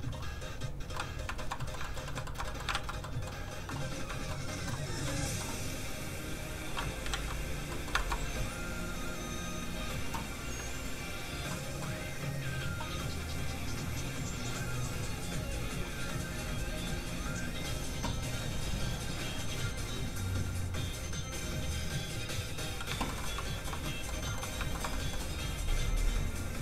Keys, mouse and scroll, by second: 0.9 middle click, 1.3 shift+middle click, 1.6 middle click, 2.0 middle click, 2.1 shift+middle click, 2.7 alt+shift+z, 3.0 alt+middle click, 3.1 middle click, 4.3 shift+middle click, 5.0 middle click, 5.1 middle click, 6.1 click, 7.1 ctrl+z, 7.7 middle click, 7.9 shift+middle click, 9.0 click, 9.1 click, 11.5 middle click, 16.8 click, 23.0 shift+middle click, 23.3 middle click, 23.3 scroll up 2, 24.0 middle click, 24.1 shift+scroll down 1, 24.2 shift+middle click, 24.3 scroll up 1, 24.7 shift+middle click, 26.1 click.